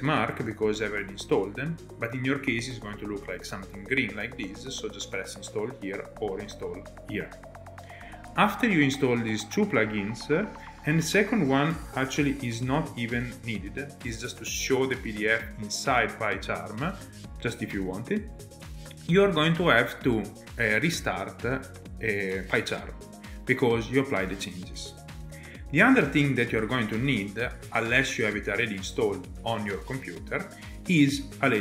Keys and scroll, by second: 11.5-13.2 typing, 26.5 alt+Tab, 27.9 alt+Tab.